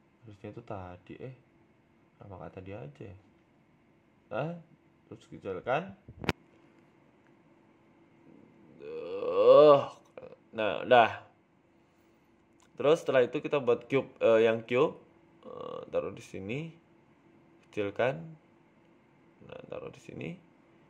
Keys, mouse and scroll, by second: 0.6 alt+shift+right click, 0.9 ctrl+z, 1.4 alt+shift+right click, 2.1 e, 2.4 s, 3.6 KP_1, 4.1-4.4 scroll up 4, 4.3 shift+middle click, 4.8 s, 5.6 s, 8.2 s, 10.1 s, 11.9-12.8 scroll down 5, 12.0 Tab, 12.2 middle click, 12.7 middle click, 13.2 shift+middle click, 13.2 scroll down 1, 13.5 middle click, 13.9 KP_1, 14.5 shift+a, 17.1 g, 18.1-18.9 scroll up 2, 18.9 s, 19.8 s.